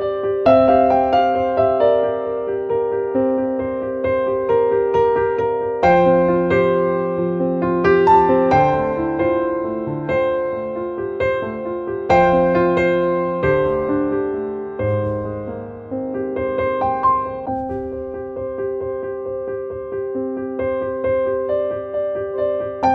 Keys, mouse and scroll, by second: 1.3-5.3 drag, 8.2 click, 15.6 click, 16.9 click, 18.0 right click, 18.7 click, 19.7-22.2 drag.